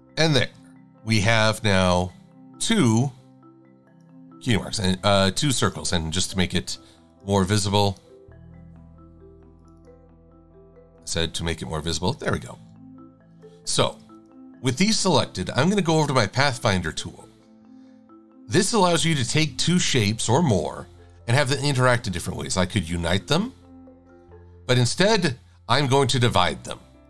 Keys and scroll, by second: 0.3 shift+x, 2.7 shift+x, 3.4 v.